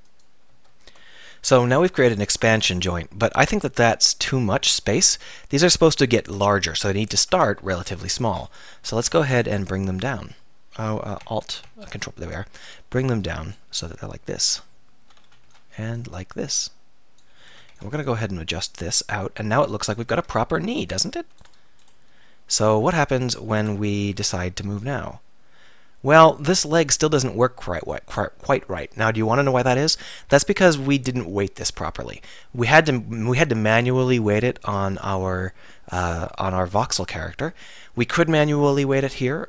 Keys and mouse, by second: 3.8 KP_3, 4.3 KP_1, 4.6 KP_3, 7.3 a, 7.7 b, 8.8 z, 9.0 b, 11.2 alt+., 15.3 a, 15.5 b, 16.1 click, 17.5 a, 17.7 b, 20.2 z, 21.4-23.7 drag, 23.6 Tab, 24.5 r, 25.6-27.9 middle drag, 30.9-31.6 middle drag.